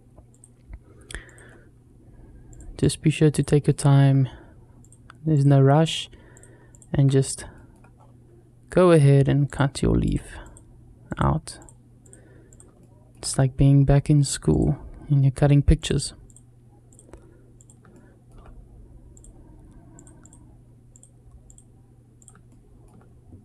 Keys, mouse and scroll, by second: 3.5 shift+middle click, 6.9-7.2 scroll down 2, 7.4 shift+middle click, 7.8 scroll up 2, 12.6 shift+middle click, 13.1 scroll up 1, 17.7 shift+middle click, 22.3 shift+middle click.